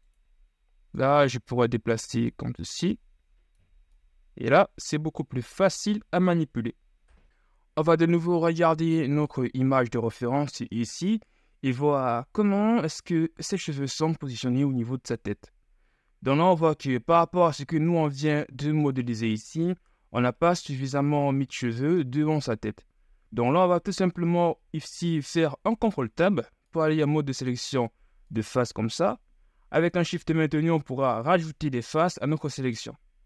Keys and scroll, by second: 5.1 ctrl+z, 5.8 ctrl+z, 6.6 ctrl+KP_1, 24.1 ctrl+Tab.